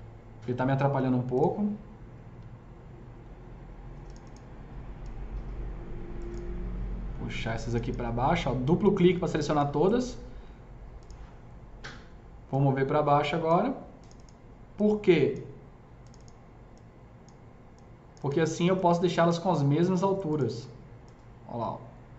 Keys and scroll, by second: 9.6 s, 19.3 s.